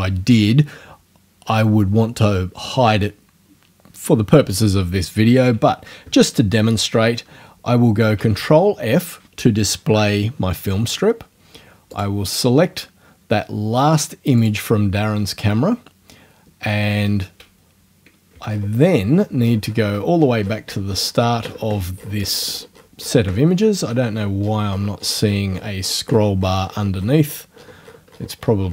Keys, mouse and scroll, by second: 8.2 ctrl+f, 11.9 click, 14.4 click, 18.5 shift+scroll up 2, 18.7 shift+scroll down 2, 18.9 shift+scroll up 2, 19.1-20.1 shift+scroll down 2, 20.1-21.7 shift+scroll down 1, 21.7-22.5 shift+scroll down 1, 22.5-23.8 shift+scroll down 1, 23.8-24.9 shift+scroll down 1, 24.9 shift+scroll down 1, 28.3 shift+scroll up 2.